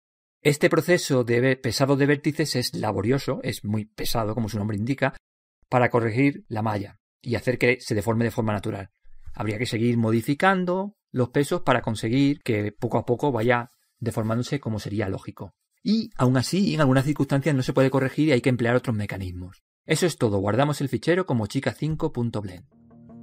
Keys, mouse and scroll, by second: 1.8-3.8 drag, 3.2-5.2 middle drag, 7.7-8.1 scroll up 1, 8.1-9.9 middle drag, 10.0-11.7 drag, 11.9-13.8 middle drag, 17.3 scroll down 1, 17.4 scroll up 1, 19.0-22.0 middle drag.